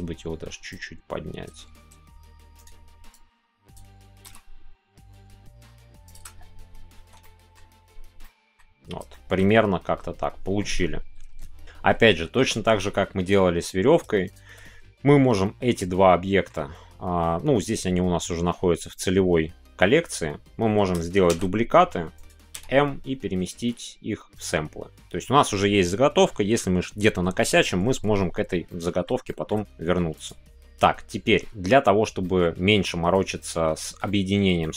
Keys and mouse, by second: 0.7-2.5 drag, 2.5 right click, 3.2 click, 4.0 g, 4.2 z, 6.0 shift+click, 7.0 Tab, 7.2 middle click, 8.2 middle click, 9.1 middle click, 9.4-10.6 middle drag, 14.3 shift+click, 15.7 middle click, 28.6-29.0 middle drag, 29.2-30.2 shift+middle drag, 30.2-32.2 drag, 32.2-33.9 middle drag, 34.0 shift+middle click, 34.6-34.7 middle drag.